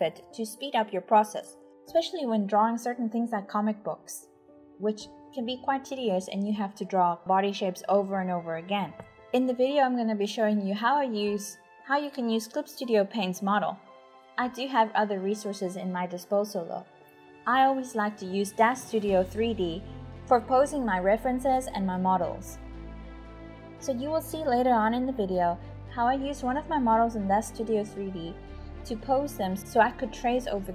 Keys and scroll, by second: 0.0-2.0 typing, 3.2-20.0 typing, 8.6 Delete, 22.7-30.7 typing.